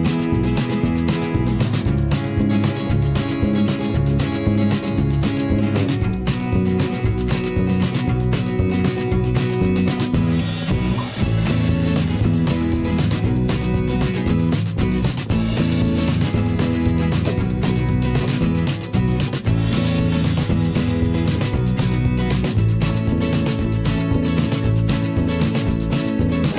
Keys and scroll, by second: 2.5 ctrl+g, 3.3 alt+Down, 3.4 Up, 4.0 i, 4.4 v, 5.1 ctrl+a, 5.3 5, 5.5 Return, 7.4 ctrl+shift+], 14.5 ctrl+c, 17.2 Delete, 19.0 ctrl+c.